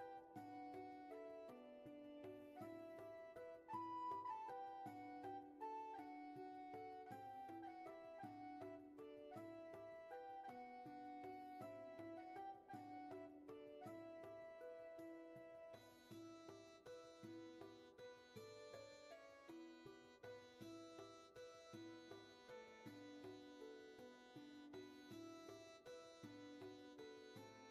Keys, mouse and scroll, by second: 0.1 space, 0.9 shift+space, 18.9 space, 19.7 space, 21.8 ctrl+z, 26.3 ctrl+z.